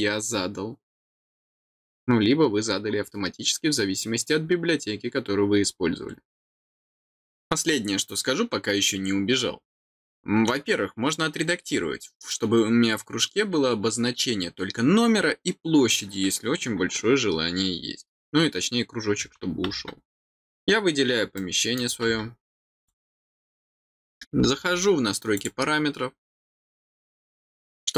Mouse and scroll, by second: 11.7 middle click, 21.3 middle click, 22.7 click, 25.3 click.